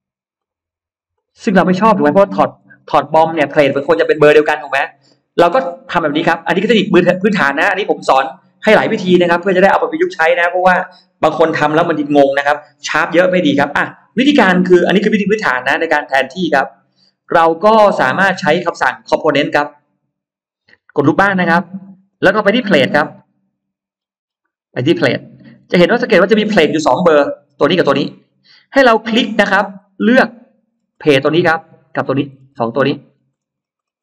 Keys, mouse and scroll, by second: 0.2 click, 1.0 click, 1.3 click, 2.5 e, 2.6 click, 3.4 middle click, 3.4-3.7 scroll down 1, 3.6 space, 3.8 middle click, 4.4 middle click, 6.1 click, 6.7 middle click, 7.2 middle click, 7.6 middle click, 7.6 scroll up 1, 14.9 click, 16.0 click, 17.6 scroll up 1, 19.5 click, 21.1 click, 22.2 middle click, 26.8 click, 29.7 middle click, 30.0 space, 30.6 scroll up 1, 31.4 click, 31.8-32.4 scroll down 2, 32.9-33.9 scroll up 4.